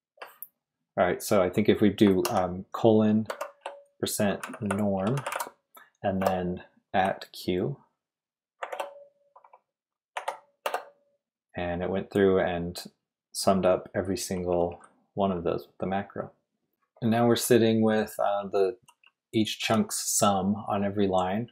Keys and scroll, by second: 2.2 shift+;, 3.3-6.2 typing, 8.6 shift+2, 10.1 q, 10.6 Return, 14.0-15.2 typing, 18.1-19.9 typing.